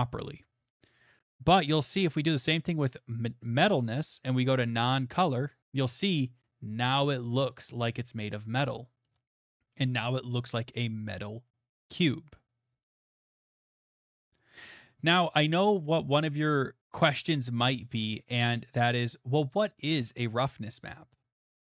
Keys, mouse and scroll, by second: 1.1 middle click, 3.2 click, 4.7 click, 9.0 scroll, 9.9-10.7 scroll, 11.2 scroll, 11.6 shift+middle click, 12.3 middle click, 13.8 click, 13.9 middle click, 14.7 click, 17.5 click, 20.6 scroll, 21.2-21.7 scroll.